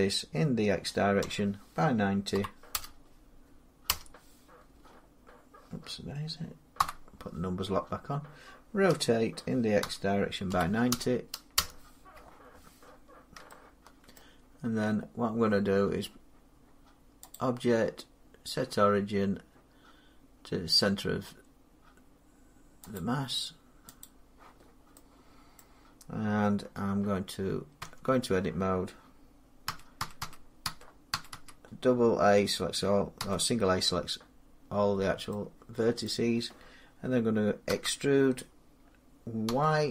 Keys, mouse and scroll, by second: 1.0 x, 2.2 Page_Up, 2.6 Insert, 3.7 Return, 6.6 Num_Lock, 8.7-11.7 typing, 11.4 Return, 13.9 shift+Return, 14.0 middle click, 17.2 click, 22.8 click, 24.8 click, 25.4 middle click, 27.6 Tab, 29.5-31.2 typing, 33.0 a, 34.7 middle click, 34.8 middle click, 35.3-35.7 scroll down 2, 35.9 middle click, 37.5 e, 39.3 y.